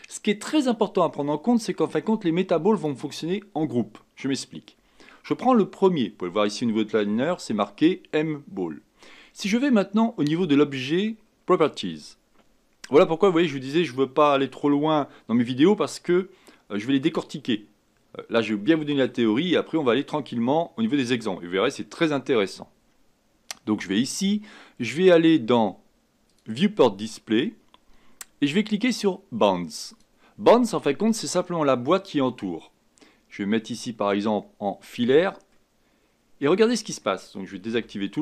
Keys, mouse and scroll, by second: 2.7 click, 11.6 click, 26.2-29.4 drag, 29.9 click, 34.8 click, 35.5-37.7 middle drag, 37.7 a.